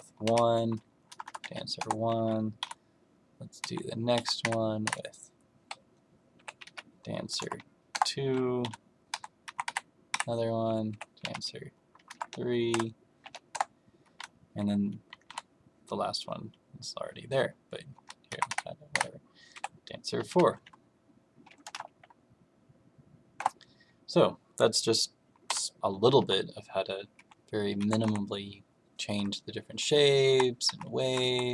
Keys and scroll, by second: 0.2-1.4 typing, 1.7 Return, 2.5 m, 3.5 Left, 4.1 Up, 4.3 Right, 4.8 Right, 6.3 Escape, 6.6 s, 7.3 BackSpace, 7.4 2, 7.8 Return, 8.6 m, 9.0 Left, 9.4 Up, 9.6 Right, 10.1 Right, 10.8 Escape, 11.1-13.1 typing, 13.4 Return, 15.2 m, 17.9 Left, 18.2 Up, 18.4 Right, 18.8 Right, 19.5 Escape, 20.2 s, 21.6 BackSpace, 21.7 4, 23.3 Return, 25.4 m, 26.1 Left, 27.1 Left, 27.7 Up, 28.0 Right, 29.1 Right, 29.7 Left, 30.2 Down, 30.6 Left, 30.9 Down, 31.2 Down.